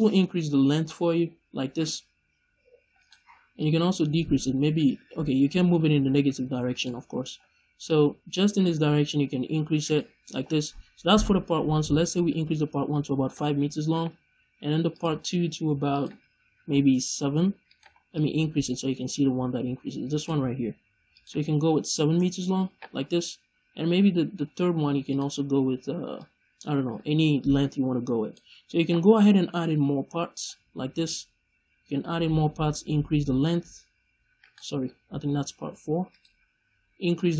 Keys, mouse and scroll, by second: 3.0 right click, 3.5-6.7 drag, 6.7 right click, 7.8-9.9 drag, 9.9 right click, 11.9-14.9 drag, 13.3 Return, 15.1-15.8 scroll down 1, 15.8-17.7 drag, 17.7 right click, 18.1-20.1 drag, 20.1 right click, 21.0-25.1 drag, 22.1 Return, 22.9 scroll down 1, 25.3 scroll down 1, 26.0-31.7 drag, 29.0-29.8 scroll up 1, 32.1-33.0 scroll down 1, 33.3-34.4 drag, 34.4 right click, 34.9-36.0 scroll down 1, 36.0 click, 36.3-37.0 scroll down 1, 37.0-37.3 drag.